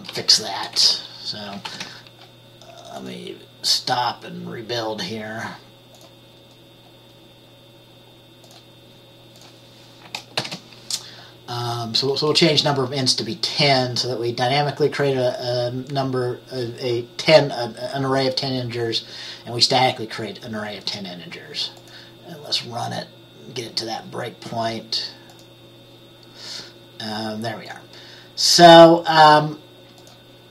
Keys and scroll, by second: 0.2-1.4 typing, 1.8 ctrl+s, 10.5 ctrl+s, 10.6 ctrl+b.